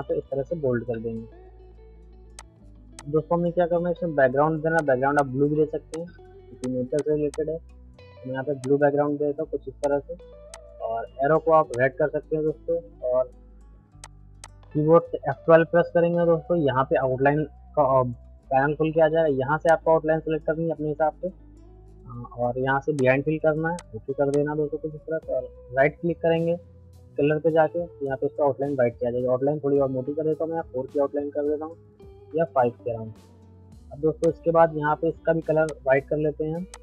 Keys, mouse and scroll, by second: 0.9 Down, 2.4 click, 3.9 shift+F2, 4.8 click, 12.2-14.0 middle drag, 14.0 click, 15.7 F12, 19.6 click, 21.9 F12, 22.9 click, 27.9 right click, 29.3 F12, 30.0 Tab, 31.8 F12, 32.3 Tab, 34.2 click.